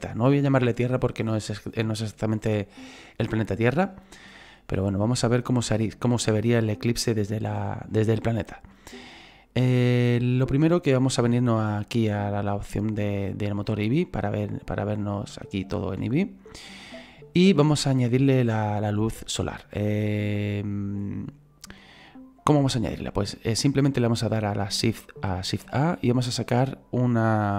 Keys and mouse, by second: 8.3 shift+middle click, 13.2 click, 15.1 shift+middle click, 18.6 click, 25.6 shift+a.